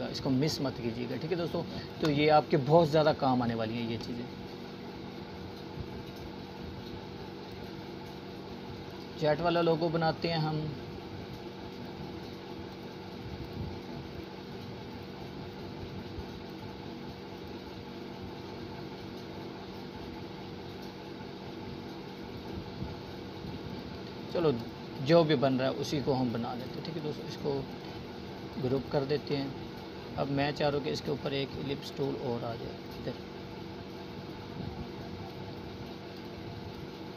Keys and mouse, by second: 1.9 click, 3.4 right click, 4.1-6.6 drag, 14.2 click, 14.6-17.0 drag, 20.6-20.9 click, 22.2 right click, 23.0 click, 25.1 right click, 26.3-29.8 drag, 36.1 right click, 36.8 click.